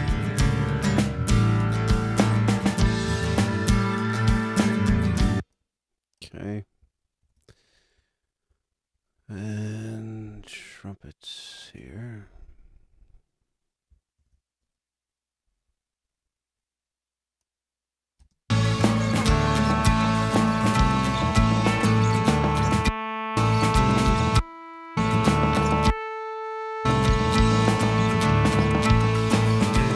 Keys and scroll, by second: 5.1 space, 7.2 super+=, 14.2 super+=, 18.2 space.